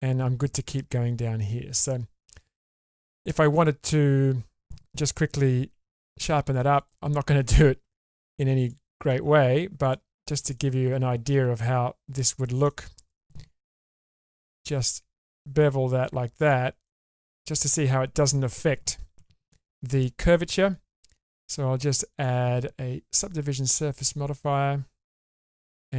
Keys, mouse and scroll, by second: 1.4-2.5 middle drag, 2.9-3.3 scroll up 1, 3.3 middle click, 4.3 scroll up 1, 5.7 2, 6.8 alt+click, 8.6 alt+shift+click, 9.8 alt+shift+click, 10.5 middle click, 12.2 alt+shift+click, 12.7 middle click, 14.0 ctrl+b, 16.9 middle click, 17.5-18.3 scroll down 1, 18.3-19.2 scroll down 1, 19.2 Tab, 22.1-24.7 drag.